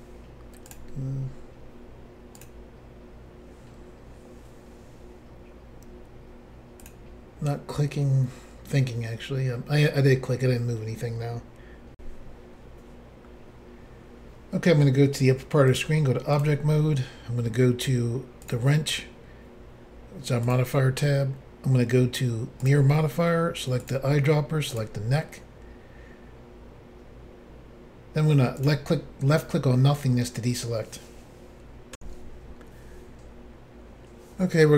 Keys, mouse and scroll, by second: 0.7 click, 0.7 click, 2.4 click, 2.4 click, 6.9 click, 12.0 Insert, 15.7 click, 16.4 click, 18.5 click, 18.5 click, 20.5 click, 20.6 click, 22.7 click, 23.9 click, 23.9 click, 24.7 click, 24.8 click, 28.6 click, 28.7 click, 32.0 Insert.